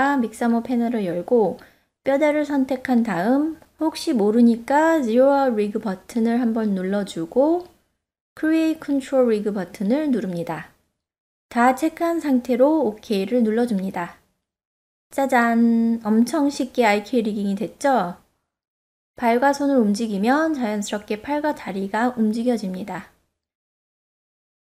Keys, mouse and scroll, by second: 1.0 click, 2.5 click, 5.3 click, 9.0-11.7 drag, 12.0 e, 15.3 ctrl+Tab, 16.6 click, 17.4-18.4 middle drag, 18.8 g, 19.0 click, 19.5 click, 20.2 click, 20.9 click, 21.2 middle click, 21.4 click, 21.6 middle click, 21.8 r, 22.2 middle drag, 22.5-23.1 ctrl+z, 23.4 middle drag, 24.0 ctrl+Tab, 24.6 click.